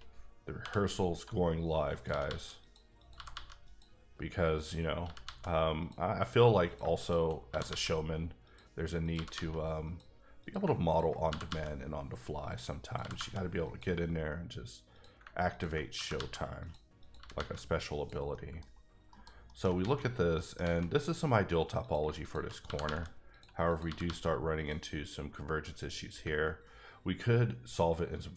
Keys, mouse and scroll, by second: 0.6 j, 1.9 click, 2.0 g, 2.2 g, 2.6 click, 3.0 click, 3.1 g, 3.3 g, 3.6 click, 4.5 click, 5.0 g, 5.2 g, 5.8 click, 6.6 click, 7.0 shift+click, 7.5 g, 7.7 g, 8.4 click, 9.0 click, 9.1 g, 9.3 g, 9.8 click, 10.4 click, 10.9 ctrl+click, 11.3 g, 12.4 click, 12.8 click, 13.0 g, 13.1 g, 13.6 click, 14.9 click, 15.5 ctrl+click, 15.9 g, 16.1 g, 16.6 click, 17.0 click, 17.1 g, 17.3 g, 17.9 click, 18.3 middle click, 18.7-19.1 scroll down 1, 19.1 KP_Decimal, 19.4 middle click, 19.6-20.1 scroll down 4, 19.8 alt+a, 20.3 middle click, 20.5 alt+middle click, 20.6 alt+a, 21.8 click, 22.0 shift+click, 22.4 click, 22.6 g, 22.8 g, 23.3 click, 23.7 click, 23.8 g, 24.0 g, 24.5 click.